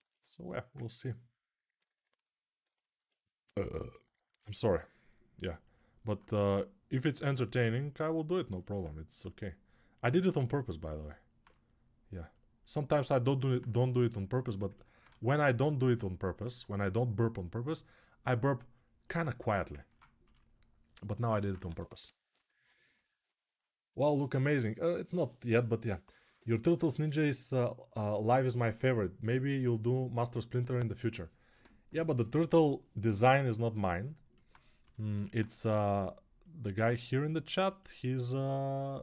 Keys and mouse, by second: 4.1 g, 11.1-15.3 ctrl+drag, 15.3-19.3 alt+right drag, 20.0-34.2 drag, 20.0 3, 34.2 alt+right click, 34.6 g, 35.1 alt+right click, 38.5-39.0 right drag.